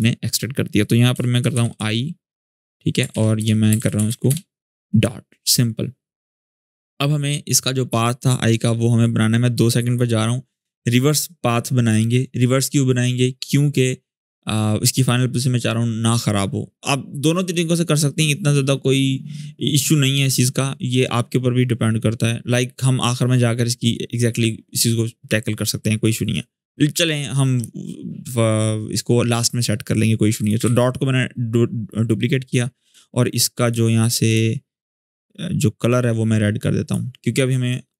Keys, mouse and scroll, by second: 0.9 Return, 1.0-2.0 typing, 2.3 Return, 2.9 ctrl+Up, 3.1 Return, 3.3-4.2 typing, 8.2 Return, 8.3-9.8 drag, 22.4-23.5 scroll up 1, 30.1 click, 30.4 ctrl+d, 32.6 click.